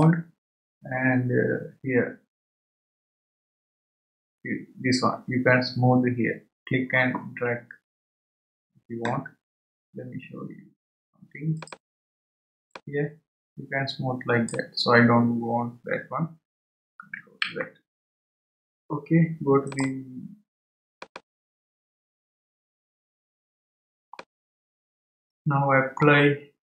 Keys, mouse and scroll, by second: 11.6-15.8 drag, 19.7-21.9 drag, 21.9 scroll down 4, 24.1-26.7 middle drag.